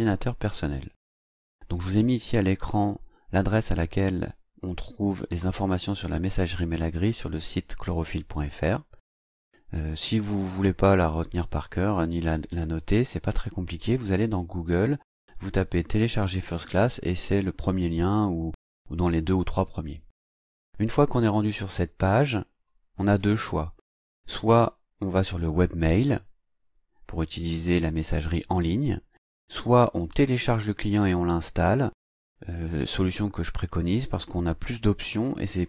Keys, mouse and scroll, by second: 22.5 click.